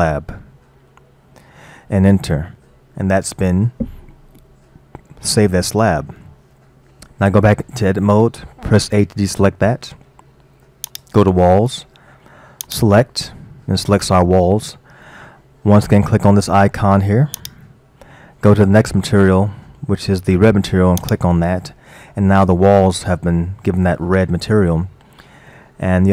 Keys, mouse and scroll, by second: 5.4-7.6 middle drag, 7.6 Tab, 8.9 a, 10.9 click, 12.7 click, 16.7-17.4 scroll down 2, 17.4-20.4 drag, 22.3-25.4 middle drag.